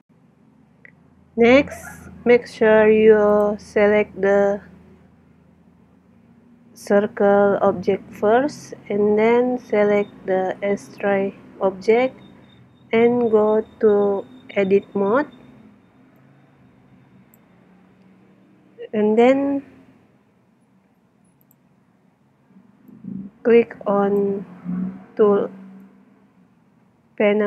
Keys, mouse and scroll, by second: 2.2-6.7 middle drag, 9.8-11.6 right drag, 12.8 Tab, 16.2-18.0 drag, 21.4-24.6 drag, 25.8-27.4 drag.